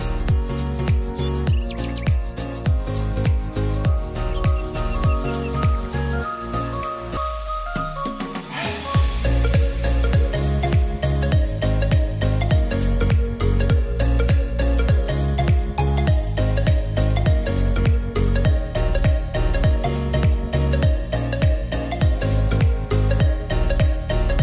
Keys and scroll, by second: 4.6-5.6 typing, 8.3-9.3 typing, 24.2 t.